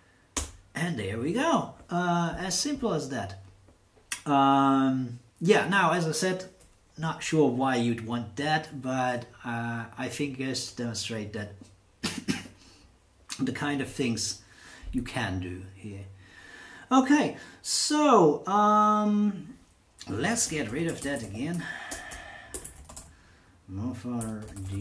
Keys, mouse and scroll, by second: 0.3 Return, 20.2-24.8 typing.